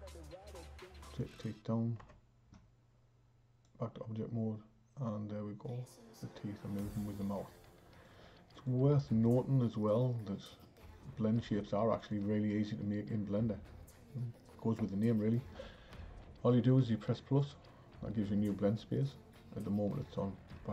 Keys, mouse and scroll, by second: 2.1 Tab, 3.6-6.7 drag, 8.5 click, 8.9 click, 12.0 click, 17.4-20.4 drag.